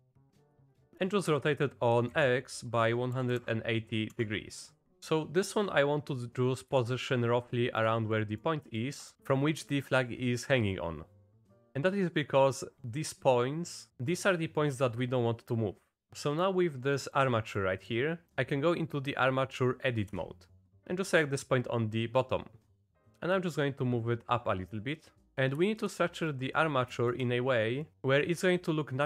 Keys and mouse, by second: 1.0 click, 1.4 r, 11.9 click, 12.7 click, 13.7 click, 14.1-16.0 drag, 16.0 middle click, 16.9 middle click, 17.7 middle click, 20.1 Tab, 20.8 z, 23.5-25.2 drag, 25.2 middle click, 25.7 shift+middle click, 26.4 middle click, 27.1 shift+middle click.